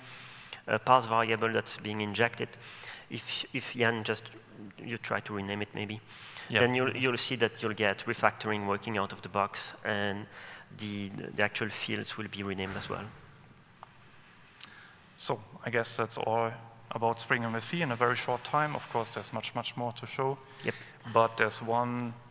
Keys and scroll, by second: 8.1 shift+F6.